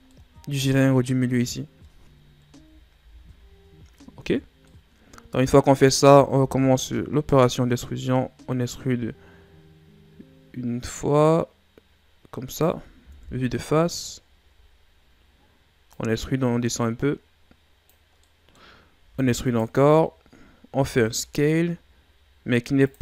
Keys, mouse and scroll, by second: 0.1-2.5 middle drag, 2.5 KP_7, 3.0 z, 4.6-6.3 middle drag, 6.3 e, 13.1 KP_1, 14.1 shift+scroll up 3, 15.9-18.2 drag, 18.2 middle click, 19.0 e, 19.9 scroll down 3, 20.8 s.